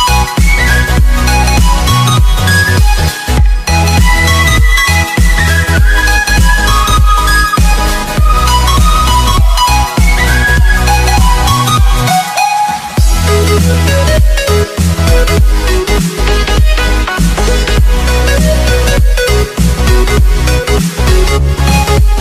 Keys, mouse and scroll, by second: 1.7 KP_2, 2.3 click, 2.5 KP_3, 3.1 click, 3.2 KP_4, 4.5 click, 5.4-6.0 alt+scroll up 3, 6.7 alt+scroll down 1, 7.0 alt+scroll up 1, 7.4 click, 12.8 Insert, 13.4 Down, 13.8 l, 14.2 Return, 15.1 click, 18.0 click, 19.1-20.0 scroll up 1, 20.0 click, 21.7 click.